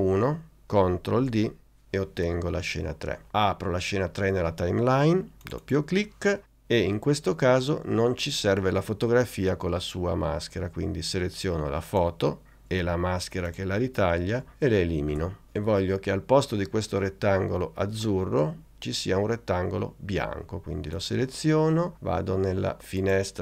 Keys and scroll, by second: 1.3 super+d, 15.2 BackSpace.